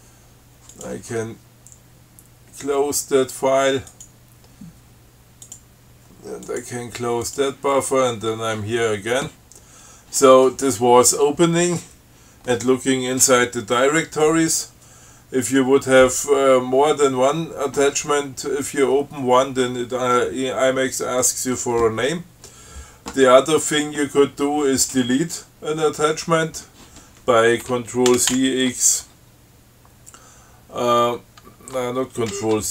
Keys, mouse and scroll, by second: 1.0 click, 4.2 click, 5.7 click, 6.7 click, 7.5 click, 28.3 ctrl+c, 28.6 ctrl+x, 32.6 ctrl+g.